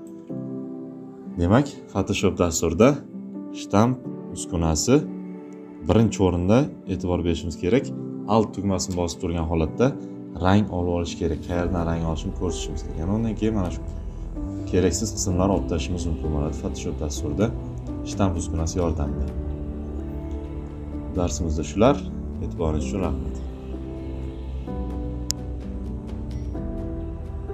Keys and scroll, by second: 0.0 space.